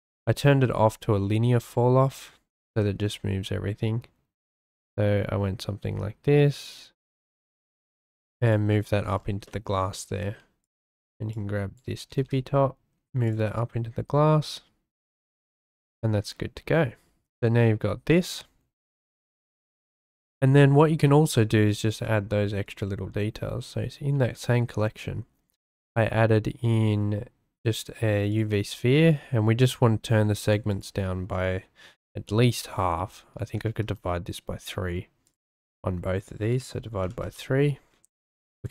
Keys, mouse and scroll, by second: 0.0 click, 0.4-1.6 drag, 2.5 g, 2.6 z, 8.5 shift+click, 9.5 shift+click, 9.9 shift+click, 10.6 click, 11.3 click, 12.1 g, 12.2 z, 18.9 Tab, 19.5-19.9 drag, 20.2-20.6 shift+drag, 21.0-21.5 drag, 21.7 shift+drag, 24.1 shift+a, 31.3-33.9 drag, 35.2-37.2 drag, 38.6 click.